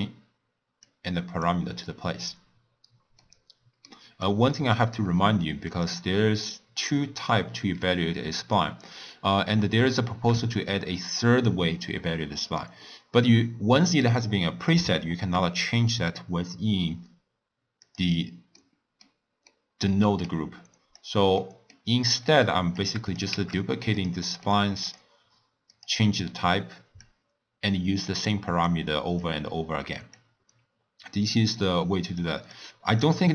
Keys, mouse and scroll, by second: 0.8 click, 3.2-4.2 middle drag, 4.2-8.7 drag, 18.5-20.2 middle drag, 20.2 click, 21.3-22.7 middle drag, 22.7 click, 23.5 shift+d, 24.2-24.8 middle drag, 24.8-27.1 drag, 28.6 click, 30.1-32.1 drag, 32.5-33.3 drag.